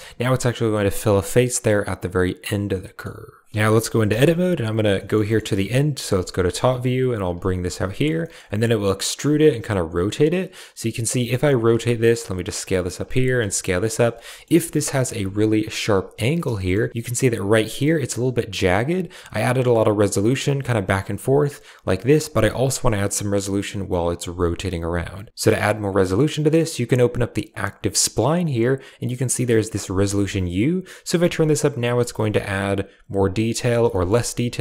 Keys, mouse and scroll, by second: 0.7 click, 2.4-2.9 middle drag, 3.5 Tab, 4.0 KP_8, 4.9 shift+middle click, 5.2 middle click, 5.9 KP_7, 7.1 click, 7.3 r, 7.6 g, 8.1 shift+middle click, 8.6 e, 9.3 r, 11.0 g, 11.5 s, 12.1 g, 12.9 click, 13.1 s, 13.8 g, 14.3 click, 14.7 r, 15.0 g, 16.2 Tab, 16.9 a, 19.8-22.3 drag, 22.5 shift+middle click, 27.4 click, 30.2-33.4 shift+drag, 33.8 shift+drag.